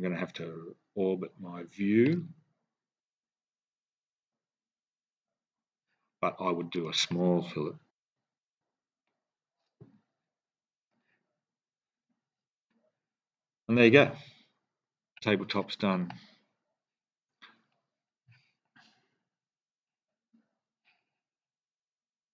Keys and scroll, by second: 7.9 3, 8.3 Return.